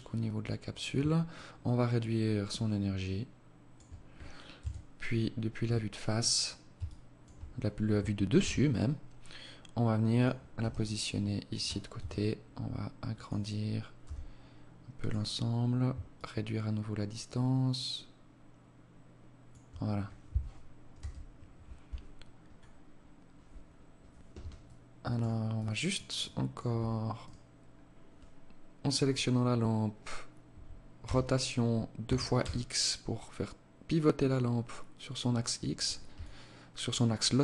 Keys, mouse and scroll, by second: 0.7 shift+click, 3.9 KP_7, 4.6-5.4 scroll down 2, 5.4 scroll down 1, 6.1 alt+shift+click, 7.7 g, 9.9 r, 11.3 s, 13.4 g, 15.5 shift+click, 20.3 KP_0, 23.9 alt+click, 24.8 alt+click, 25.5 alt+click, 26.5 right click, 28.4 scroll up 2, 30.3 r, 35.5 alt+click.